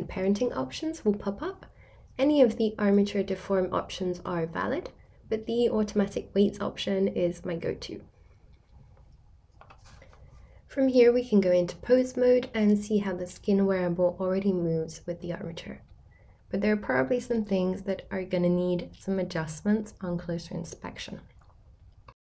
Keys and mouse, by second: 9.4 r, 15.0 right click, 16.5 r, 21.2 right click.